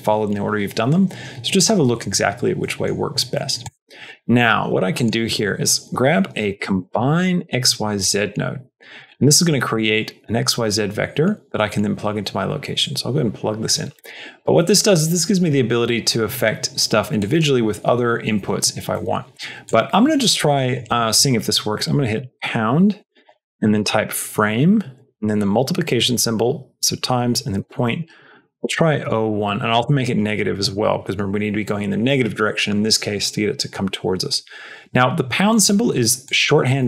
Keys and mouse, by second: 2.6 middle click, 3.3 middle click, 3.6 click, 4.3 shift+a, 7.7 Down, 9.2 middle click, 9.6 click, 12.7 click, 13.8 middle click, 17.1 click, 18.9 middle click, 19.7 click, 20.4-36.8 drag, 29.5 Left, 29.6 Left.